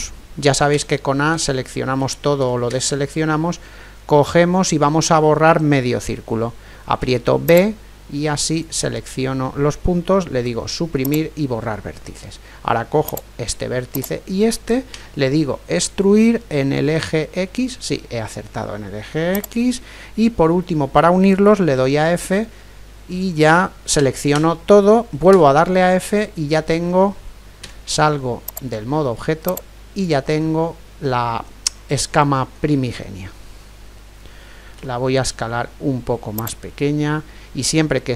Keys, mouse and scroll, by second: 0.7 a, 1.3-5.8 a, 6.9 b, 10.4 Delete, 13.1-15.8 right drag, 14.9 e, 21.7 f, 22.3-24.3 middle drag, 24.0 a, 24.3 a, 25.3 f, 25.8-27.6 middle drag, 27.6 Tab, 29.4-34.8 drag, 30.8-34.8 middle drag, 34.8 s, 35.1 middle click.